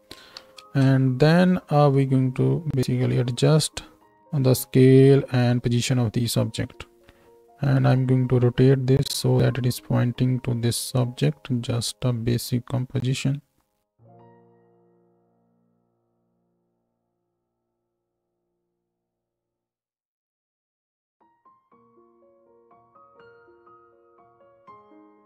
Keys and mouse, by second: 0.6 ctrl+space, 3.5 KP_0, 7.0 s, 7.2-15.0 middle drag, 7.8 r, 14.1 s, 15.6 shift+d, 16.4 s, 17.0 r, 19.8 shift+d, 21.5 right click, 21.8 r, 24.0 shift+middle click, 24.2 shift+d, 25.1 s.